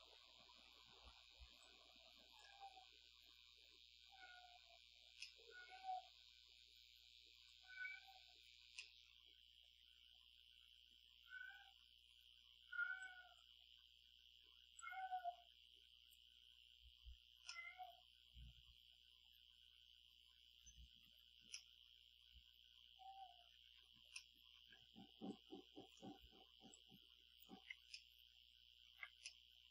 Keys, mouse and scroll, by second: 1.6-2.6 drag, 5.2-5.9 middle drag, 7.5-8.7 drag, 8.8-11.8 middle drag, 13.0-13.6 drag, 14.8-16.3 drag, 17.5-21.2 middle drag, 21.5-23.7 middle drag, 24.1-24.7 ctrl+middle drag, 25.3 click, 26.7 click, 28.0-29.0 ctrl+middle drag, 29.3-29.7 ctrl+middle drag.